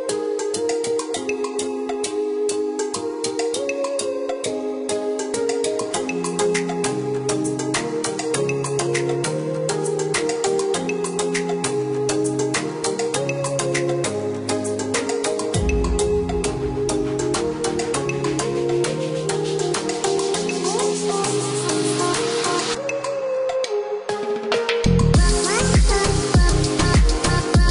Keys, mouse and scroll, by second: 0.7 click, 4.2 click, 6.3 click, 6.6 Escape, 10.0 click, 12.0 click, 12.6 click, 13.4 KP_5, 13.6 KP_4, 14.0 KP_Add, 14.2 KP_2, 15.0 KP_Enter, 15.6 Escape, 16.2-17.1 scroll up 1, 17.1-17.6 scroll down 1, 17.6-18.1 scroll up 1, 18.1-19.5 scroll down 1, 19.5 click, 21.0 click, 23.3 click, 24.2 Escape, 25.3 click, 27.2 click.